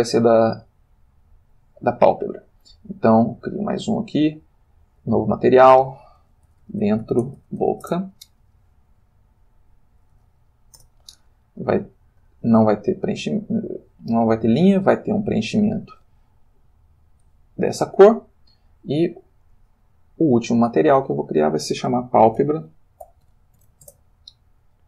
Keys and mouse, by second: 3.2 click, 4.0 click, 4.6 click, 5.4 click, 6.5-7.7 typing, 7.8 shift+Return, 9.5 click, 9.8 click, 10.2 a, 10.8 Return, 12.2 click, 13.8 click, 14.9 click, 15.8 click, 17.3 click, 19.5 click, 20.5 click, 21.2 click, 22.2-23.6 typing, 23.8 Return.